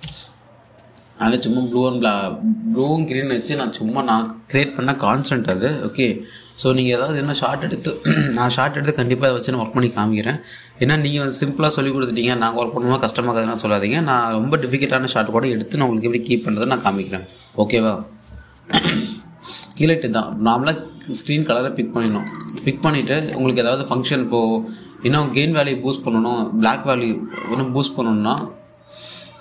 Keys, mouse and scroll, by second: 0.3 click, 0.7 typing, 4.2 click, 7.3 click, 7.7-8.4 typing, 20.3 click, 22.9 click, 23.2 1, 29.0-29.4 drag.